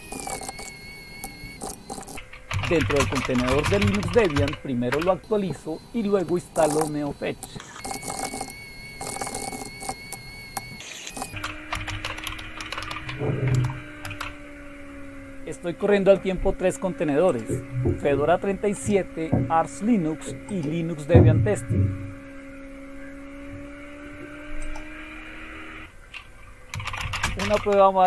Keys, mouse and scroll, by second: 0.0-4.8 typing, 1.2 Return, 4.9 Return, 6.3-13.3 typing, 7.4 Return, 11.0 click, 13.5 Tab, 14.0 Return, 17.2 click, 18.7 click, 20.5 click, 24.6 click, 25.5 click, 26.5-28.0 typing.